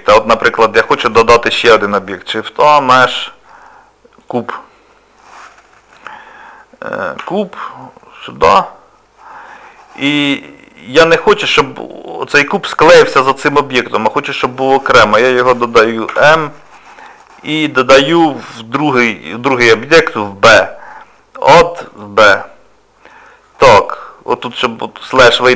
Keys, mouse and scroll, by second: 0.3 middle click, 1.7 shift+a, 23.9 click, 25.2 KP_Divide.